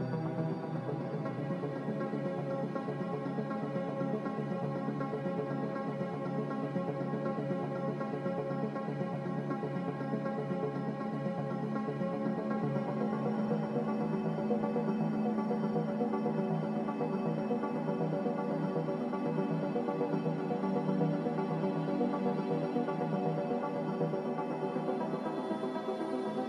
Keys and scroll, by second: 0.3 typing, 3.4 s, 5.8 a, 7.6 ctrl+c, 8.0 ctrl+v, 9.1 Escape, 10.0 s, 11.4-12.4 typing, 13.5 z, 14.4 Escape, 16.1-16.9 typing, 16.4 Return, 19.2 n, 21.1 a.